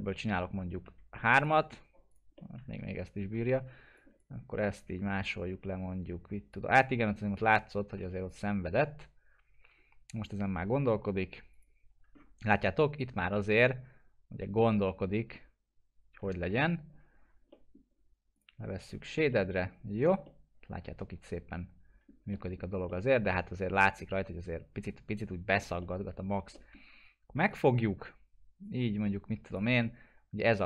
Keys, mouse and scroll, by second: 0.8 3, 1.4 click, 2.4-3.3 middle drag, 4.0 click, 4.5 w, 5.2-6.8 shift+drag, 7.6-8.5 typing, 8.3 click, 11.5 click, 12.0 scroll down 1, 12.5-16.3 alt+middle drag, 18.3 click, 19.3 middle click, 19.9 scroll up 1, 20.2-22.1 alt+middle drag, 26.1 scroll down 1, 26.5 alt+middle click, 27.8-29.7 drag, 29.8-30.6 alt+middle drag.